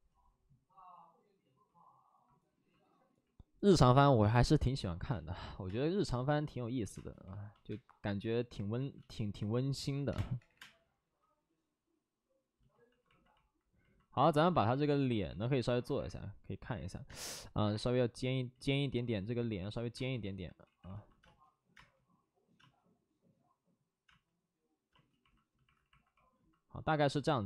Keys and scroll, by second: 5.0 space, 5.5 j, 6.9 space, 6.9 3, 7.2 alt+s, 7.6 space, 8.7 ctrl+z, 10.0 space, 10.0 3, 10.3 3, 10.5 3, 12.8 alt+s, 16.3 alt+s, 17.0 space, 18.5 ctrl+z, 19.9 space, 20.6 ctrl+z, 20.8 alt+s, 21.1 space, 25.6 alt+s, 25.6 space.